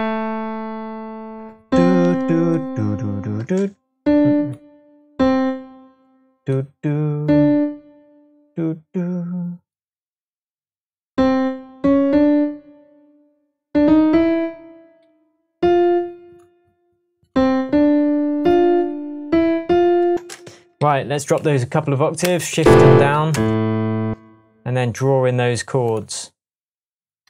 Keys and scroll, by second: 0.7 space, 3.3 space, 15.0 Right, 18.6 Right, 20.1 space, 20.7 space, 20.8 a, 22.6 Down, 23.3-24.7 space.